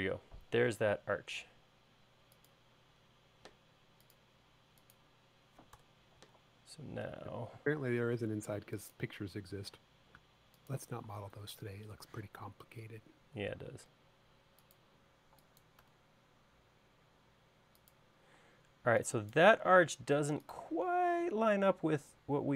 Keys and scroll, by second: 6.0 BackSpace, 12.4 q, 18.7-19.0 typing.